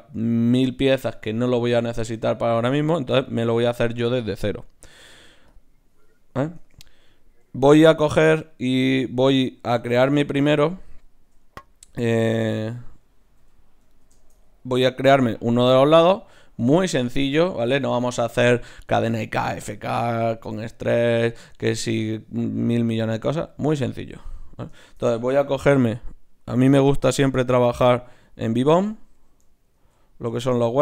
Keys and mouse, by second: 5.5-7.2 drag, 6.6 Tab, 7.2-9.1 middle drag, 8.5-12.9 right drag, 10.0-13.4 middle drag, 13.4 KP_1, 24.3-27.1 right drag, 27.1-29.8 drag, 29.8 ctrl+alt+s.